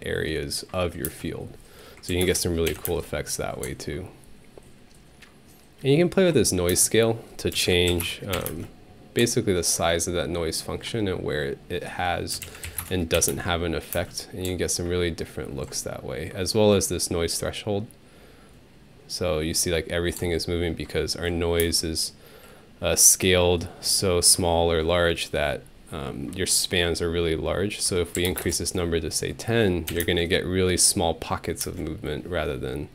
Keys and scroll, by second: 1.1 space, 2.1 5, 2.2 Return, 2.7 Home, 2.9 space, 6.7 alt+space, 7.3-8.5 typing, 12.1-13.3 typing, 14.4 space, 21.6 alt+space, 27.9-28.8 typing, 29.9 Home, 30.0 space, 31.6 space.